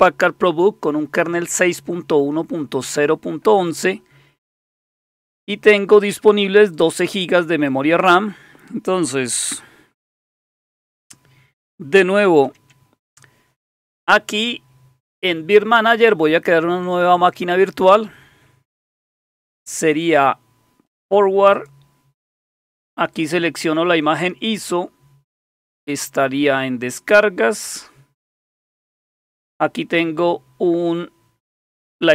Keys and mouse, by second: 4.6-5.8 drag, 6.6 click, 7.5 click, 10.8 shift+super+q, 12.4 super+9, 16.1 click, 21.5 click, 23.1 click, 25.9 click, 31.6 click.